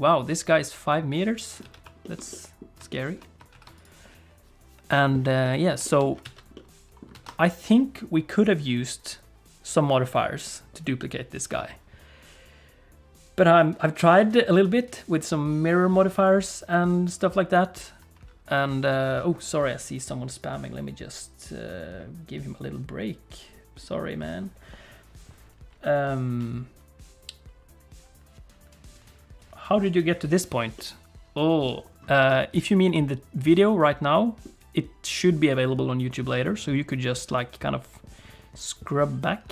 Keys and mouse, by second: 1.5 alt+click, 1.6 alt+a, 2.0 click, 2.3 click, 2.9 click, 3.5 ctrl+s, 3.7 click, 5.4 middle click, 5.8 shift+click, 6.0 middle click, 6.2 alt+a, 6.5 middle click, 7.2 ctrl+s, 30.7 click, 32.3 shift+click, 32.9 click, 33.4-34.4 middle drag.